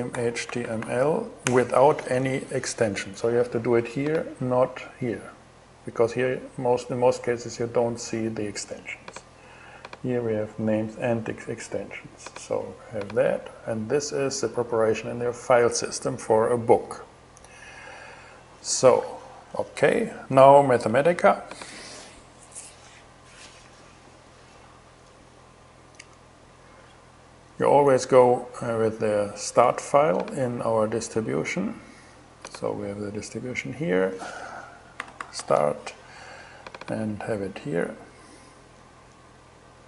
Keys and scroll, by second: 0.0-0.9 typing, 1.0 Return, 34.1-35.3 typing.